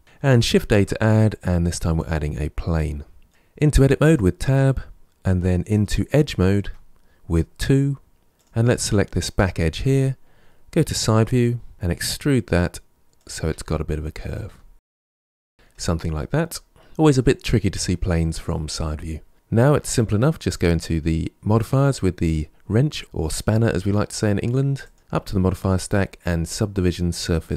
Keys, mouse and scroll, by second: 0.4 shift+a, 3.8 Tab, 6.5 2, 8.2 click, 10.6 KP_3, 10.7-11.7 scroll up 5, 11.7 e, 13.3 e, 14.3 e, 14.9 e, 15.6 middle click, 16.3-16.8 scroll down 4, 16.8 middle click, 18.5-20.1 middle drag, 20.1 click, 24.6-27.4 drag.